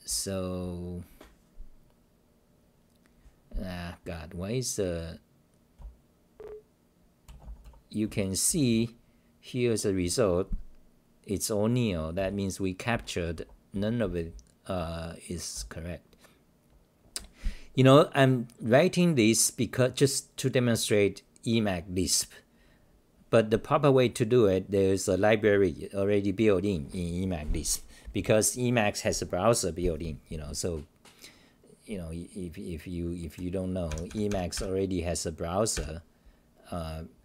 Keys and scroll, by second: 0.0-0.8 typing, 5.8-37.2 typing.